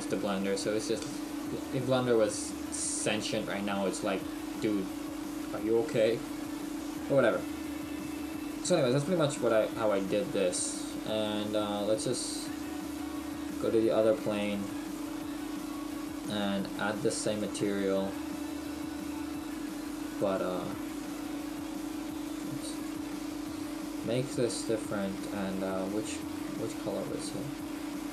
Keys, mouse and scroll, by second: 0.3 click, 0.6 Delete, 1.4-1.8 scroll down 2, 2.2-2.5 scroll down 5, 4.5 shift+middle click, 4.5 shift+scroll down 1, 7.9 shift+middle click, 7.9 scroll down 5, 8.4 middle click, 9.3-9.6 scroll down 1, 9.6 shift+middle click, 10.3-10.8 scroll up 1, 14.6 click, 17.4 click, 20.4 click, 24.9 scroll up 3, 26.6 shift+middle click, 26.6-28.1 scroll up 6.